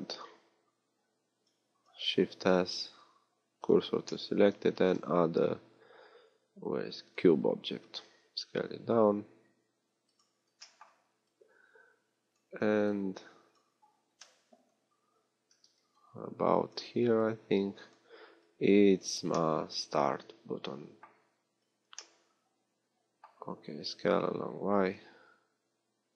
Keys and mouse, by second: 2.3 shift+s, 4.7 shift+a, 8.1 s, 14.3 KP_3, 14.7-19.7 middle drag, 15.7 z, 20.3 middle click, 21.6 z, 22.3 middle click.